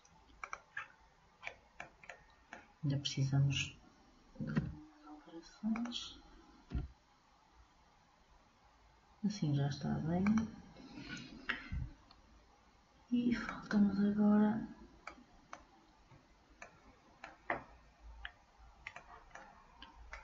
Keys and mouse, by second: 0.9 middle click, 13.6-17.0 drag, 17.0-18.4 middle drag, 19.1-20.2 middle drag.